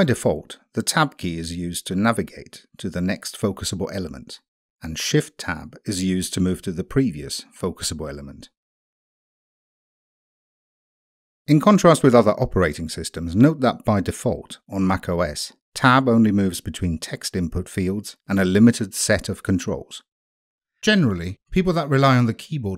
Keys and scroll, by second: 0.7 Tab, 2.2 Tab, 3.5 Tab, 4.9 Tab, 6.3 Tab, 7.8 shift+Tab, 9.1 shift+Tab, 10.2 shift+Tab.